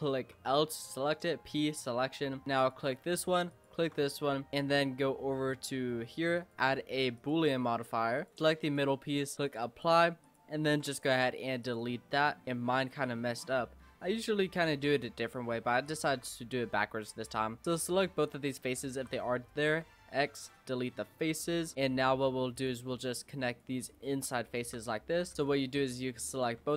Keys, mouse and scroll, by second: 0.4 l, 1.3 p, 2.1 Tab, 2.3 scroll down 3, 2.6 click, 3.5 shift+click, 5.5 click, 7.3-8.3 drag, 9.3 click, 10.2 click, 10.7 x, 11.4 scroll up 1, 11.6 click, 12.0 Tab, 12.2 scroll up 3, 12.4 middle click, 12.8 scroll down 1, 13.0 shift+middle click, 13.8-14.5 scroll up 2, 14.5 click, 15.0 middle click, 15.8 shift+click, 17.6-19.1 middle drag, 19.1 x, 20.8 shift+middle click, 21.6 scroll down 1, 21.7-22.5 scroll up 2, 22.5-23.6 drag, 24.5 shift+click, 25.3 click, 25.6 middle click, 26.3 shift+click.